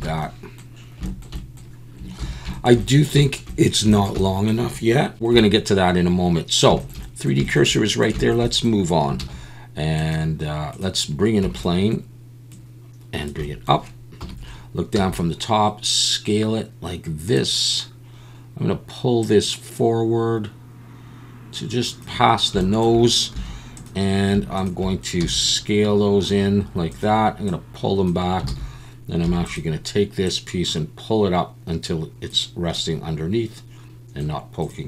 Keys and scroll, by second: 2.2 ctrl+s, 9.2 shift+a, 11.4 Tab, 14.2 KP_7, 14.9 s, 23.3 1, 25.2 s, 28.5 alt+a, 29.2 2.